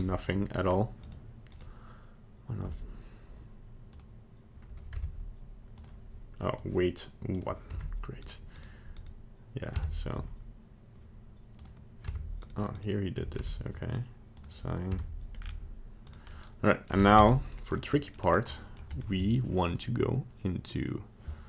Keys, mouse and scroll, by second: 0.2 right click, 0.6-0.9 scroll up 2, 1.0 right click, 1.6 right click, 3.9 click, 4.9 Tab, 5.7 click, 6.5 click, 7.3 click, 7.7 Tab, 8.2 right click, 8.5 right click, 8.9 right click, 9.7 Tab, 11.6 click, 12.1 Tab, 12.4 right click, 12.7 right click, 13.4 Tab, 14.3 click, 14.9 Tab, 15.4 scroll down 3, 16.0 right click, 16.3 middle click, 17.1 z, 17.9 middle click, 18.2 scroll down 1, 18.5 middle click, 19.6 click.